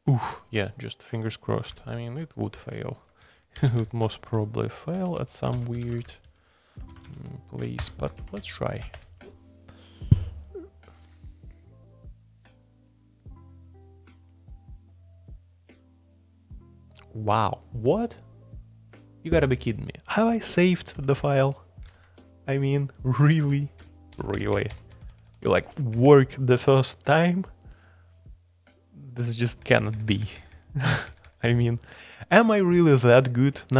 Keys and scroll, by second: 0.0-0.4 typing, 2.1 super+j, 2.1-3.0 typing, 3.5 shift+super+k, 4.9 Up, 5.1 Up, 5.5-7.4 typing, 7.8 Return, 8.1 Up, 8.9 Return, 20.9 super+k, 21.9 super+j, 23.8 shift+Page_Up, 24.1 shift+Page_Up, 24.3 shift+Page_Up, 24.5 shift+Page_Up, 25.1 shift+Page_Up, 25.2 shift+Page_Up, 25.5 shift+Page_Up, 25.9 shift+Page_Down, 29.6 shift+Page_Down, 29.7 shift+Page_Down, 29.9 shift+Page_Down, 30.0 shift+Page_Down, 30.2 shift+Page_Down, 30.5 shift+Page_Down, 30.9 shift+Page_Down, 31.2 shift+Page_Down, 31.4 shift+Page_Down.